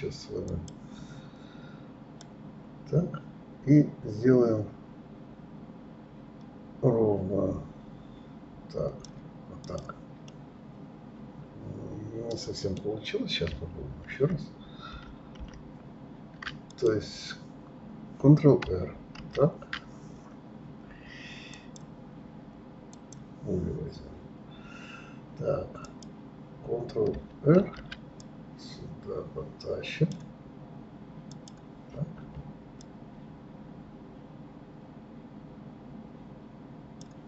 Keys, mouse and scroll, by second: 0.6 click, 2.3 click, 9.8 click, 10.4-13.4 middle drag, 15.1 ctrl+z, 16.9 click, 19.3 ctrl+r, 21.7-23.4 drag, 26.0 click, 27.7 ctrl+r, 32.9 click.